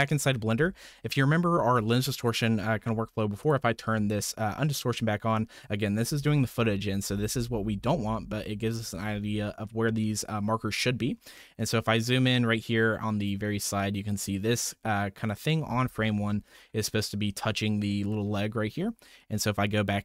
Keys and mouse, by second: 0.9 shift+click, 3.8 m, 6.3 alt+v, 6.5 alt+v, 7.0 v, 7.2 v, 7.3 v, 7.5 v, 8.6 alt+v, 8.9 alt+v, 9.1 alt+v.